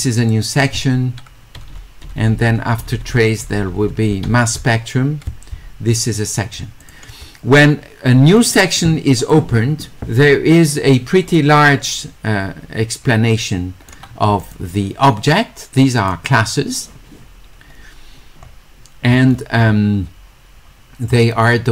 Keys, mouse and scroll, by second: 6.2 click, 6.8 click, 8.4 click, 11.4-13.9 drag, 14.4 click, 15.9 click, 16.0 click, 17.5 middle click, 17.7 middle click, 18.4 middle click, 21.1 middle click.